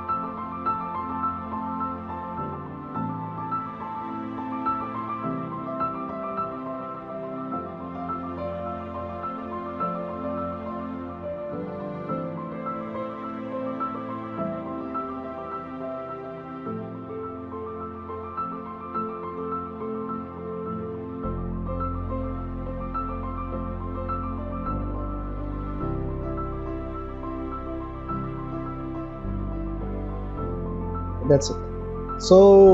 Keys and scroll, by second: 0.1 space, 0.5 ctrl+shift+x, 0.8 ctrl+shift+z, 0.9 Escape, 2.7 space, 4.1 ctrl+z, 4.5 ctrl+t, 4.8 Escape, 5.0 ctrl+j, 5.1 ctrl+t, 5.9 Return, 6.0 space, 8.0 ctrl+d, 10.1 ctrl+t, 11.0 Return, 12.0 Delete, 12.3 ctrl+d, 14.9 m, 15.2 Delete, 15.5 ctrl+g, 15.7 ctrl+z, 16.2 ctrl+d, 17.4 v, 19.5 space, 20.3 ctrl+z, 21.0 space, 23.4 v, 26.0 ctrl+0, 26.7 ctrl+=, 26.9 space, 27.6 m, 28.5 v.